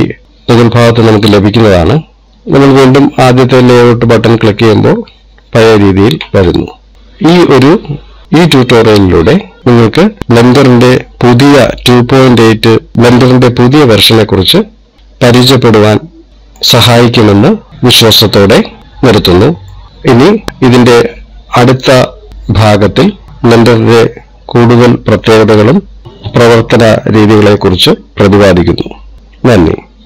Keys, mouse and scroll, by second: 2.8 click, 6.9 middle click, 9.6 middle click, 12.9 middle click, 15.9 middle click, 18.3 middle click.